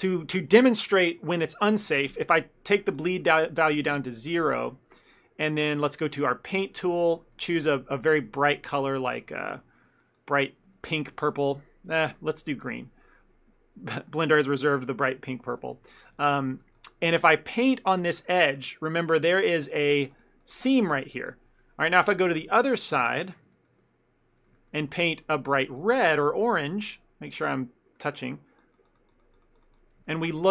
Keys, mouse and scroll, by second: 3.0 click, 5.0 ctrl+middle click, 6.2 click, 7.4 middle click, 8.6 click, 12.0 click, 14.2 ctrl+middle click, 14.8 shift+middle click, 15.1 ctrl+middle click, 15.9 shift+middle click, 16.3 ctrl+middle click, 16.7 f, 17.9 click, 19.3 shift+f, 20.2 click, 21.7 middle click, 22.2 shift+middle click, 23.6 ctrl+middle click, 23.9 middle click, 24.6 ctrl+middle click, 25.5 click, 26.5 ctrl+middle click, 27.0 middle click, 28.3 click, 30.1 ctrl+middle click.